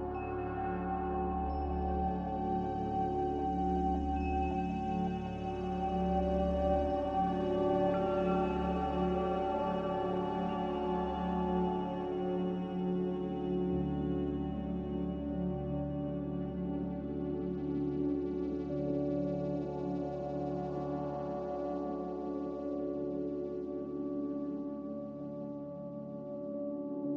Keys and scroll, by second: 0.7 z, 2.3-3.1 typing, 4.2 ctrl+z, 5.8-6.6 typing, 8.0 typing, 9.7-10.5 typing.